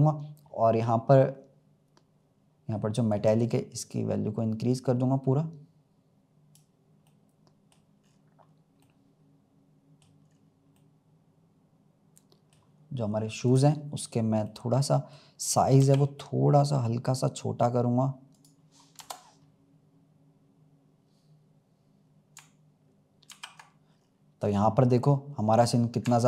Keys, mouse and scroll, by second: 2.1-3.0 scroll down 1, 3.0-6.1 drag, 7.0-8.0 middle drag, 8.0 scroll up 3, 8.8-10.1 middle drag, 10.1 scroll down 1, 10.3 scroll up 1, 10.7-13.4 middle drag, 13.4 click, 13.9 scroll up 1, 14.4-15.7 middle drag, 15.7 s, 18.9 KP_0, 20.9-21.5 scroll down 2, 23.3 ctrl+s, 23.8-24.2 scroll up 3, 24.5-25.3 scroll up 3, 25.3-25.7 scroll down 2.